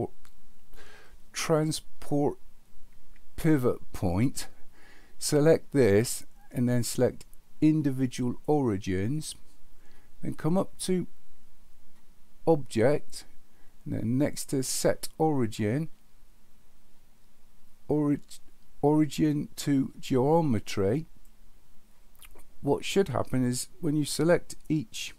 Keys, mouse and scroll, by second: 5.2-8.4 drag, 13.1-21.2 drag.